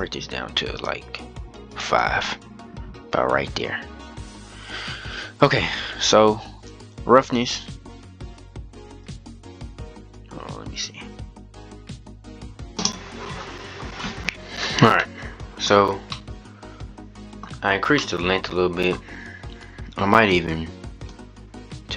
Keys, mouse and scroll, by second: 2.5-6.3 scroll down 24, 6.3-7.4 drag, 7.4-7.9 scroll down 2, 7.9-8.8 scroll up 1, 8.8-11.1 drag, 13.8-14.3 scroll down 2, 14.8-15.6 scroll up 2, 15.6-16.1 scroll up 2, 16.1-17.3 middle drag, 17.3-17.8 scroll down 4, 17.8-20.8 middle drag, 20.8-21.9 drag.